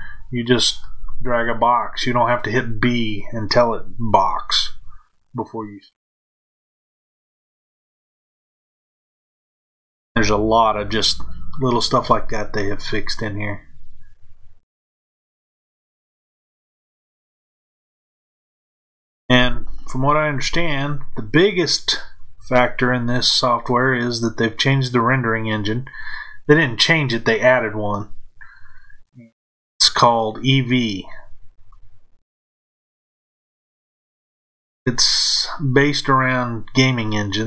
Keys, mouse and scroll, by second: 9.2 shift+click, 11.9 f, 13.0-34.8 middle drag, 34.8 shift+click.